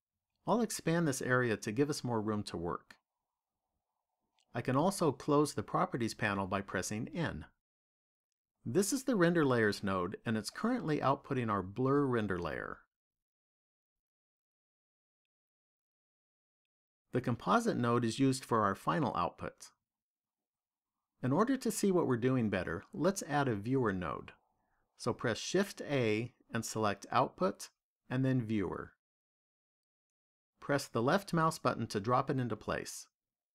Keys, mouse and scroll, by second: 1.7 click.